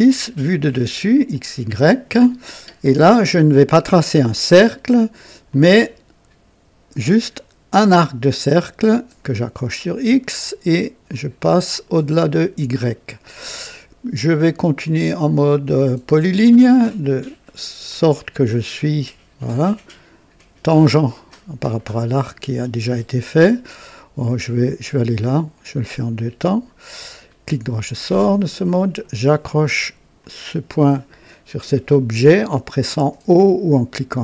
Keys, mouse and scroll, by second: 1.3 click, 5.4 click, 7.1 click, 9.1 click, 11.0 click, 11.7 right click, 13.2 right click, 16.1 click, 18.0 click, 24.8 click, 25.3 right click, 27.1 right click, 28.5 click, 30.1 click.